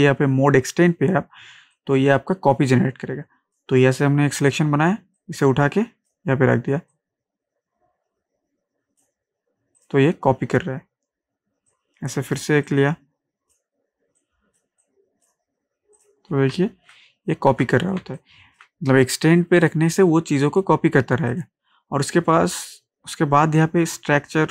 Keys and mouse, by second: 1.7-5.2 drag, 5.2-16.0 drag, 16.5 ctrl+space, 16.7 ctrl+click, 17.5 ctrl+d, 18.0 ctrl+space, 18.2 ctrl+click, 18.6 ctrl+space, 19.6 click.